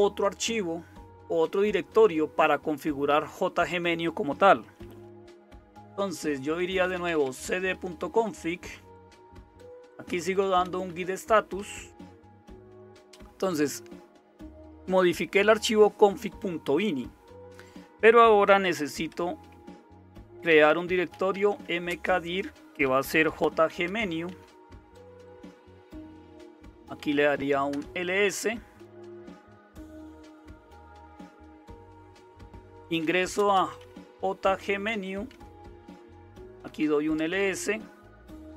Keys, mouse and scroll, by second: 5.0-7.6 typing, 7.7 Return, 9.1-12.1 typing, 18.6-25.5 typing, 26.8-27.7 typing, 32.8-37.2 typing.